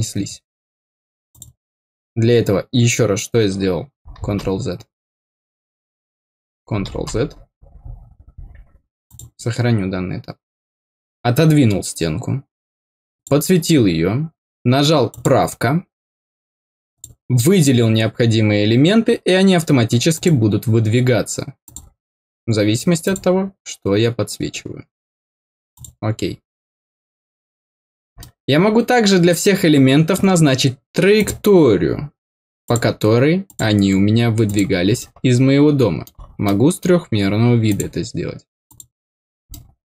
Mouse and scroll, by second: 1.2 click, 9.0 click, 13.1 click, 15.0 click, 16.8 click, 20.1 click, 21.6 click, 23.0 click, 25.7 click, 28.1-30.1 middle drag, 29.7 scroll down 1, 31.1 click, 32.6 click, 33.4 click, 34.4 click, 34.9-36.0 middle drag, 36.4 middle click, 37.6 click, 38.6 click, 39.4 middle click.